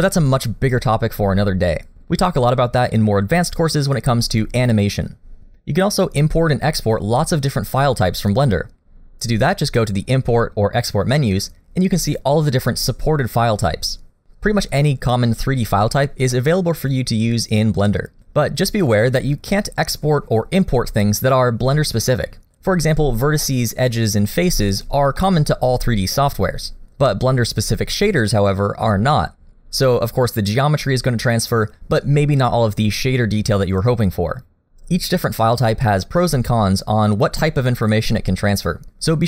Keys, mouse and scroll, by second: 23.4 middle click, 24.0 scroll up 2, 24.6 shift+middle click, 25.0 scroll up 1, 25.2 middle click.